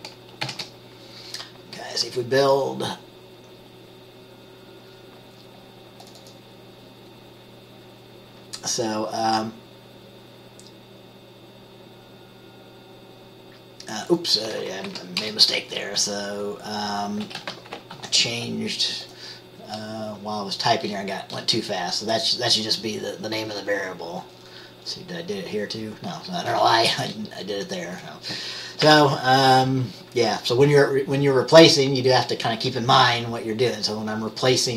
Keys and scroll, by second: 0.6 ctrl+b, 15.0 Right, 15.3 BackSpace, 17.4 typing, 18.1 ctrl+s, 29.0 ctrl+s.